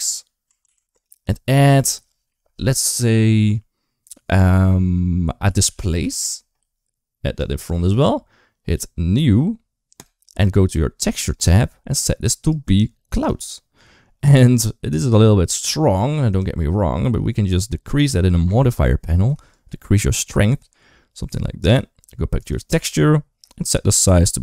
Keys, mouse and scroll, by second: 1.5 click, 7.2-7.8 drag, 7.9 typing, 12.3 click, 16.1 click, 19.5-21.6 shift+drag, 23.6-24.4 shift+drag.